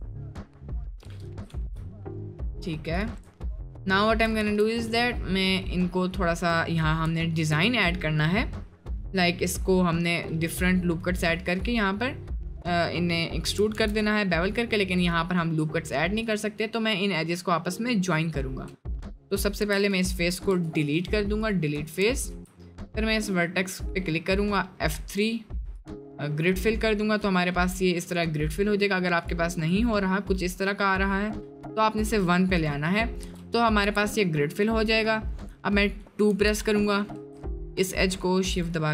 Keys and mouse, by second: 0.0 middle drag, 0.4 click, 0.7 Tab, 1.1 middle click, 1.5 ctrl+r, 2.9 click, 3.6 shift+middle click, 4.0 shift+click, 4.4 1, 7.3 shift+click, 9.8 middle click, 10.3 middle click, 13.7 ctrl+r, 19.7 3, 20.5 x, 21.7 1, 22.5 middle click, 24.2 middle click, 25.0 F3, 26.5 middle click, 27.0 middle click, 27.8 middle click, 29.2 click, 32.6 click, 33.0 middle click, 33.3 Tab, 36.3 2, 36.7 click, 37.8 shift+click.